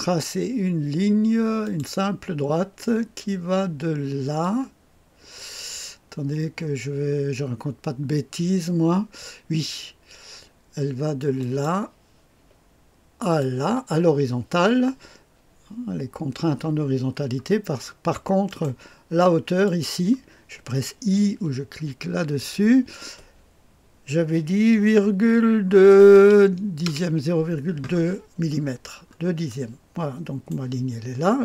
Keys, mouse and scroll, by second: 1.6 click, 4.3-9.6 drag, 11.3 click, 13.1 click, 17.1-18.4 scroll up 1, 18.4 middle click, 19.6 click, 22.3 i, 25.0 ,, 25.7 KP_2, 26.8 Return, 28.4-30.5 scroll up 1, 29.4-31.1 middle drag.